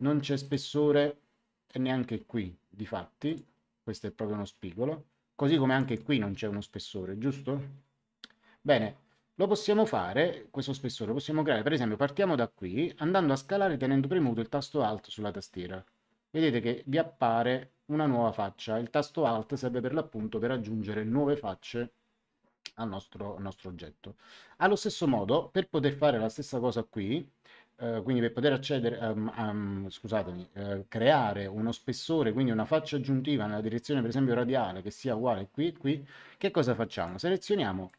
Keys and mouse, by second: 0.4 click, 3.2 click, 5.6 click, 15.1 click, 36.9 click.